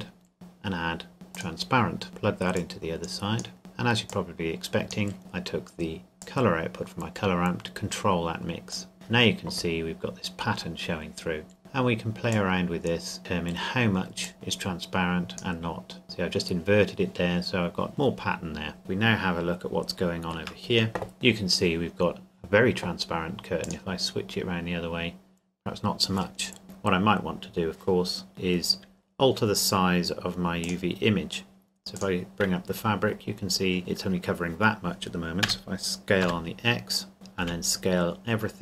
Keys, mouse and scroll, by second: 1.3 click, 11.6 click, 18.0 scroll down 1, 18.9 shift+middle click, 21.6 scroll up 1, 23.6 click, 26.6 click, 28.3 scroll down 1, 28.6 scroll up 1, 28.9-29.3 scroll down 1, 29.3 scroll up 1, 29.4-30.6 scroll down 1, 30.6 click, 32.5 scroll up 1, 32.7-33.8 scroll down 1, 33.8-35.0 scroll up 1, 35.4 s, 36.2 x, 37.1 click, 37.4 s.